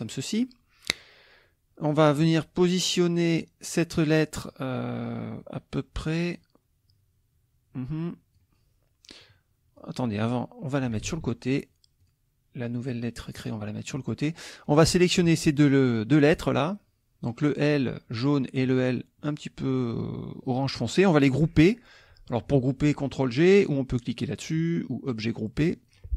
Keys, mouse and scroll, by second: 3.7-8.5 drag, 9.8-11.0 drag, 11.1 ctrl+z, 12.0 click, 12.9-14.1 drag, 14.6 click, 15.5 shift+click, 16.3 shift+click, 18.7 shift+click, 25.1 click, 25.9 click.